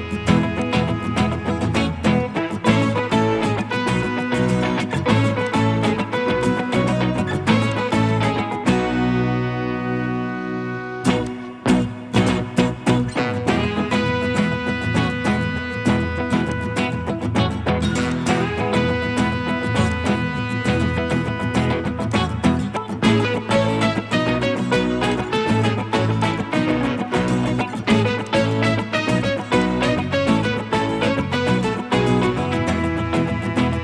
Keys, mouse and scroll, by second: 3.8 Escape, 7.7 ctrl+click, 19.9 ctrl+click, 27.0 middle click.